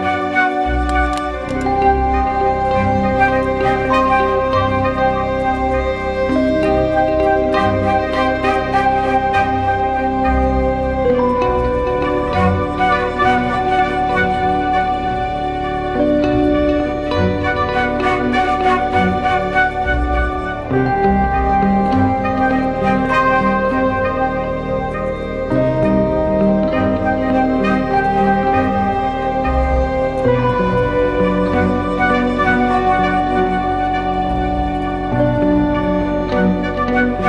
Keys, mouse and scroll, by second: 1.0 alt+shift+click, 6.9 Return, 12.9 ctrl+t, 19.1 Return, 26.8 double click, 27.9-30.4 scroll down 1, 34.9 ctrl+click, 35.5 right click.